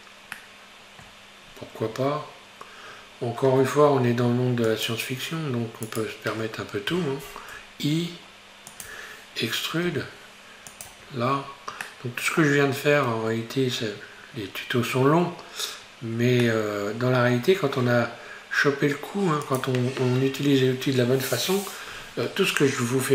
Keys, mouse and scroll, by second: 0.4-1.6 shift+middle drag, 1.6 scroll up 3, 2.0 Tab, 3.6-4.0 scroll down 5, 4.9 click, 5.9 right click, 6.9 i, 10.0 e, 10.9 Tab, 11.5-11.9 scroll down 4, 11.9-14.9 middle drag, 16.5-17.5 middle drag, 17.5-18.4 scroll up 3, 19.6 click.